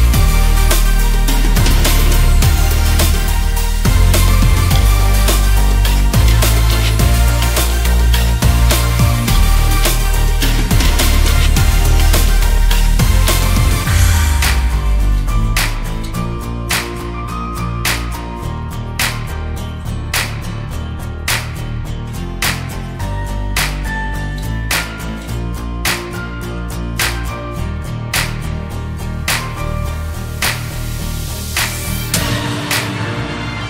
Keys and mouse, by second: 1.7 KP_0, 14.2-16.1 drag, 19.6 KP_0, 26.2 click, 27.5 drag, 28.4 click, 31.7 r, 32.6 click, 33.4 click.